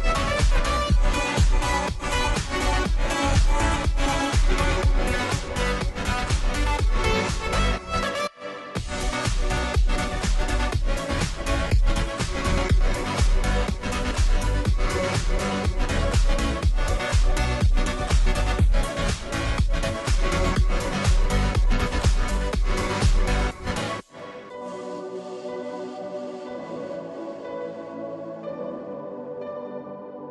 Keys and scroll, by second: 3.1 space, 7.1 space, 23.8-24.6 space.